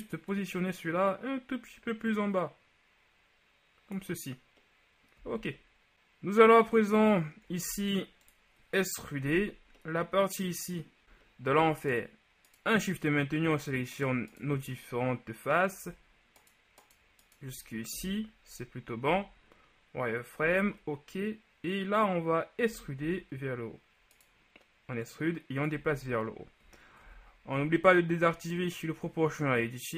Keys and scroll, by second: 5.3 z, 7.7 ctrl+Tab, 18.0 shift+KP_1, 19.1 z, 23.1 z, 25.9 ctrl+z, 27.1 0.